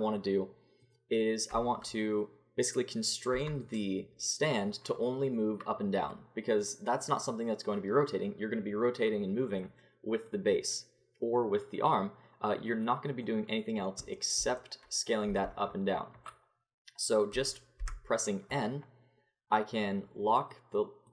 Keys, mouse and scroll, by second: 3.3 Tab, 10.2-13.2 drag, 13.2-15.3 middle drag, 15.3 s, 17.8 n, 19.1-21.1 drag.